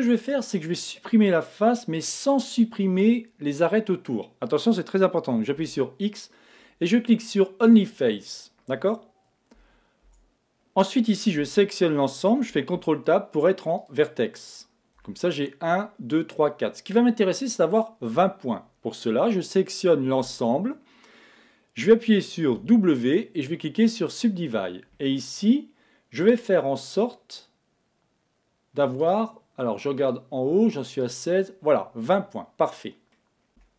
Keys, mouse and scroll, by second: 5.6 x, 8.1-10.0 middle drag, 9.6 Tab, 10.0 Tab, 11.4 a, 12.7 ctrl+Tab, 15.0 a, 20.2 a, 22.5 w, 29.0-32.8 drag, 33.2 middle click, 33.6 a.